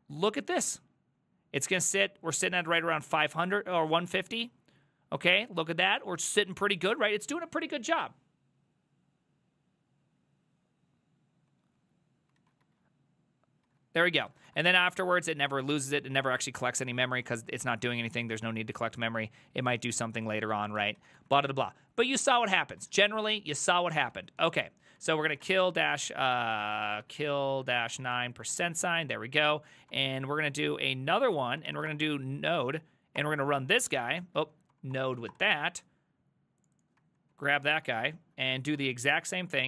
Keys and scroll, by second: 0.0 ctrl+a, 12.4 ctrl+a, 12.6 ctrl+a, 13.7 ctrl+a, 14.1 ctrl+a, 14.3 ctrl+a, 14.5 ctrl+a, 20.8 ctrl+c, 21.0 ctrl+a, 21.2 ctrl+a, 22.8 ctrl+a, 23.0 ctrl+a, 24.2 ctrl+c, 24.4 ctrl+c, 24.6 ctrl+c, 24.8-28.7 typing, 26.7 ctrl+c, 29.9 Up, 30.1 Up, 30.2 Up, 30.9-32.4 typing, 32.6 Up, 33.2 Return, 34.5 ctrl+c, 34.5-35.7 typing, 37.3 ctrl+c, 37.6 ctrl+a, 37.8-39.3 typing, 39.3 ctrl+w.